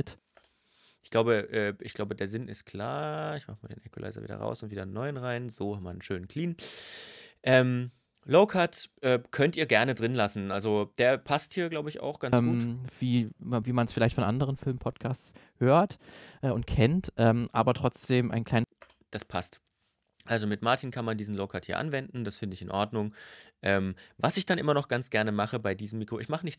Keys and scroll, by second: 0.0 space, 12.1 space, 18.4 space.